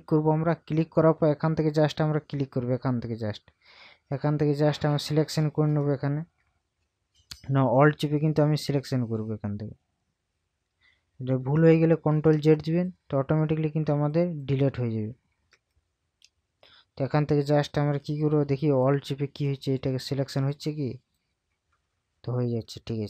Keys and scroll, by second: 11.8 ctrl+z, 13.9 ctrl+z, 15.5 ctrl+z.